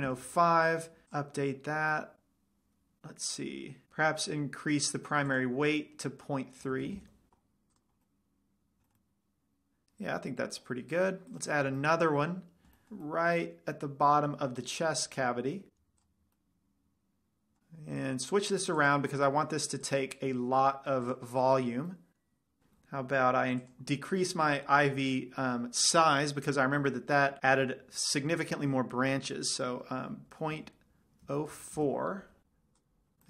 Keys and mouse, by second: 1.7 click, 2.3-3.2 middle drag, 5.6-7.4 drag, 8.2 middle drag, 8.5 middle drag, 11.8-13.4 middle drag, 13.5 middle click, 13.7 middle click, 14.0-15.0 middle drag, 16.2 middle click, 19.2-21.8 drag, 25.5 click, 33.1-33.2 drag.